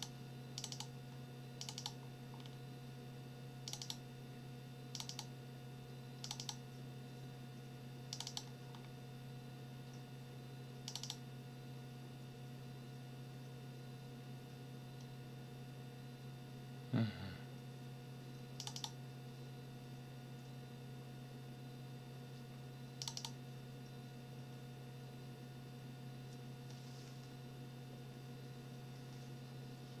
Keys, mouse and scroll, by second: 0.6 click, 1.6 click, 2.3-2.7 scroll down 1, 3.7 click, 4.9 click, 8.1 click, 8.7 scroll down 1, 10.9 click, 18.6 click, 23.0 click.